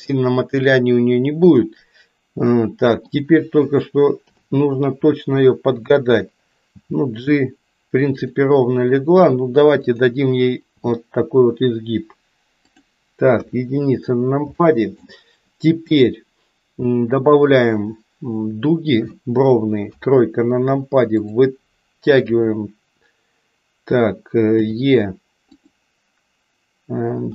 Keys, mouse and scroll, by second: 2.5 middle click, 4.2 KP_7, 6.7 g, 10.7 g, 13.4 KP_1, 14.6 shift+middle click, 19.7 KP_3, 24.5 e, 27.2 g.